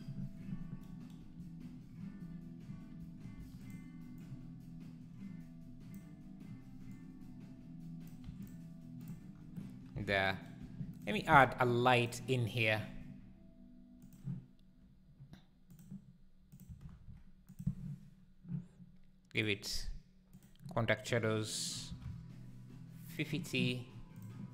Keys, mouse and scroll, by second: 3.3 shift+d, 4.2 click, 7.3 click, 8.2 x, 9.1 click, 9.3-10.0 scroll down 1, 10.0 alt+a, 10.9 shift+right click, 11.1 shift+a, 12.9 g, 17.5 KP_0, 20.3 click, 23.0 click.